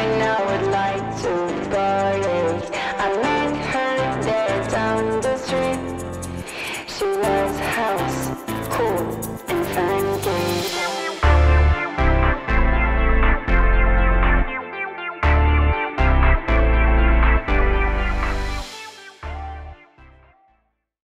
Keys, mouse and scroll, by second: 2.0-2.3 alt+middle click, 3.4 alt+click, 3.7 middle click, 3.7 middle click, 5.0 shift+right click, 10.0 click, 11.2 alt+click, 12.3 click, 13.5 click, 15.0 click, 15.3 alt+middle click, 15.7 alt+click.